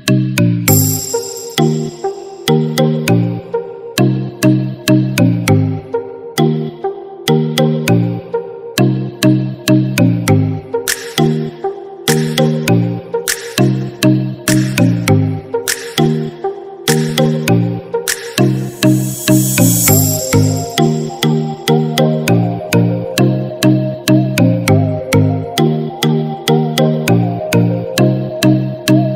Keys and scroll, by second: 4.5 ctrl+-, 6.6 ctrl+0, 8.0 ctrl+d, 12.7 ctrl+-, 19.1 ctrl+-.